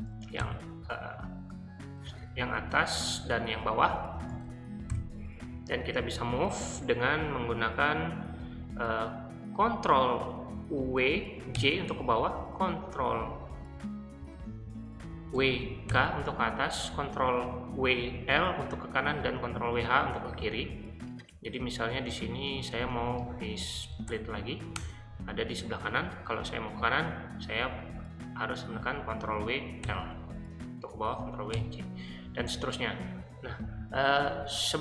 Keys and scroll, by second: 0.4 ctrl+j, 2.6 ctrl+w, 2.8-3.5 typing, 4.3 ctrl+w, 4.9 k, 11.0 ctrl+w, 11.5 j, 15.3 ctrl+w, 15.9 k, 22.7-24.2 typing, 24.8 Return, 29.3 ctrl+w, 29.8 l, 31.0 ctrl+w, 31.5 j.